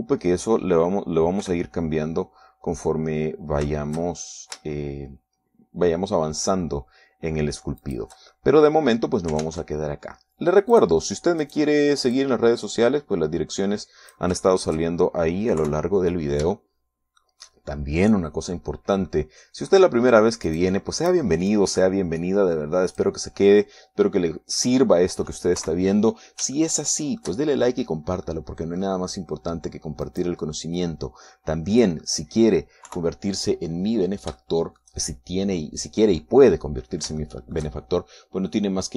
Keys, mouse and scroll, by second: 0.3 shift+middle click, 1.1 shift+KP_3, 3.0 r, 9.4 shift+click, 10.0-11.0 shift+middle drag, 11.0 ctrl+Tab, 12.4 click, 13.0 right click, 13.8-16.0 drag, 16.0 shift+middle click, 17.2 KP_3, 18.2 shift+middle click, 20.2 middle click, 21.4 middle click, 22.1 right click, 23.2-24.8 drag, 25.2-27.0 middle drag, 27.2 KP_3, 28.2-29.4 shift+middle drag, 29.9-31.4 middle drag, 31.7 right click, 32.4-33.7 drag, 33.7 middle click, 34.5 KP_3, 35.5-36.0 scroll down 1, 36.0 shift+middle click.